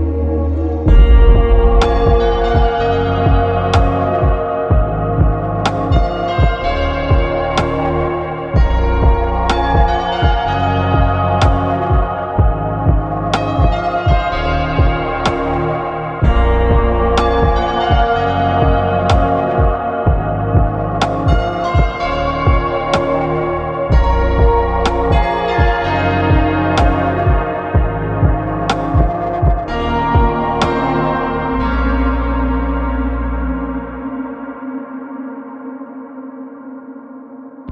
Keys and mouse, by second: 14.8 u, 15.1 r, 15.1 g, 15.9 click, 16.7 q, 16.9 click, 17.3-18.7 drag, 18.7 q, 18.9 click, 19.6 click, 20.0 click, 21.2 click, 22.0 click, 22.6 click, 23.2 click, 23.4 click, 23.6 ctrl+s, 23.8 click, 24.4 ctrl+s, 25.0 shift+a, 25.2 click, 25.9 click, 26.3 q, 26.7 click, 27.7 ctrl+s, 28.1 click, 28.7 click, 29.5 middle click, 29.9 a, 30.3 l, 30.3 r, 30.5 alt+a, 30.5 g, 30.7 Tab.